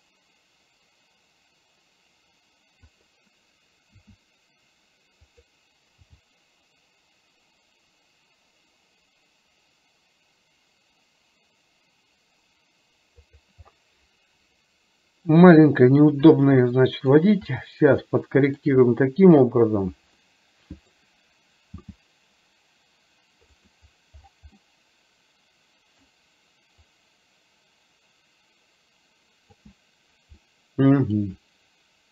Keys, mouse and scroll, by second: 4.1 s, 6.1 g, 13.7-15.4 middle drag, 16.8-17.2 shift+middle drag, 17.7-18.8 shift+middle drag, 20.3 middle click, 20.3 scroll up 1, 21.1 scroll down 1, 21.8 g, 24.7-26.2 middle drag, 26.9 click, 27.2-29.7 drag, 30.6-31.2 middle drag.